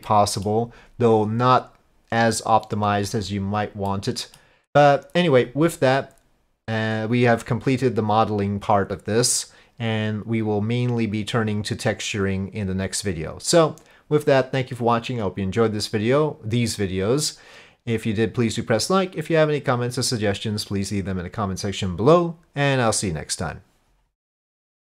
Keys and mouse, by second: 0.1 middle click, 3.9-4.3 drag, 4.3-24.1 middle drag.